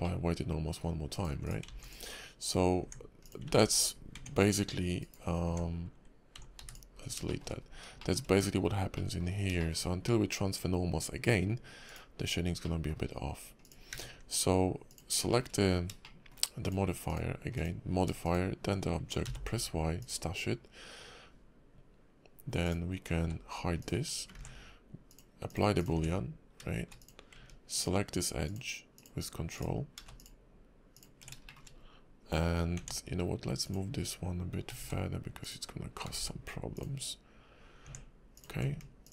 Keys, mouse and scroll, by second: 0.0 middle click, 1.1 click, 1.4 click, 1.8 click, 2.8 Tab, 3.2 click, 5.0 right click, 5.4 Tab, 6.6 x, 6.9 scroll down 4, 7.3 shift+middle click, 7.5-8.5 scroll up 8, 8.0 shift+middle click, 8.9 middle click, 9.3 scroll up 2, 9.6 shift+middle click, 11.9 click, 12.6 middle click, 13.6 click, 13.9 q, 15.3 shift+middle click, 16.0 shift+middle click, 17.1 click, 17.5 click, 18.2 shift+click, 19.2 y, 22.6 click, 23.2 h, 23.8 click, 24.3 ctrl+`, 25.9 Tab, 27.0 click, 27.7 ctrl+click, 28.4 ctrl+click, 28.9 ctrl+click, 29.5 ctrl+click, 30.0 ctrl+z, 30.1 ctrl+click, 30.9 ctrl+click, 31.5 shift+middle click, 31.7 scroll up 2, 32.8 Tab, 33.6 click, 34.7 g, 36.1 g, 37.8 Tab, 38.3 click, 39.0 ctrl+click.